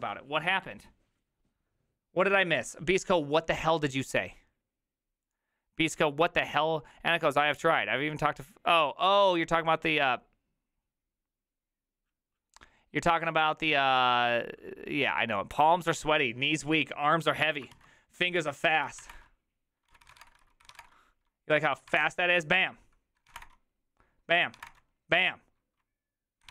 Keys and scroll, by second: 18.8-25.1 typing, 19.9 ctrl+d, 20.0 ctrl+c, 20.1 ctrl+:, 20.2 Return, 20.4 ctrl+u, 20.6 ctrl+c, 20.7 ctrl+:, 26.3-26.5 typing.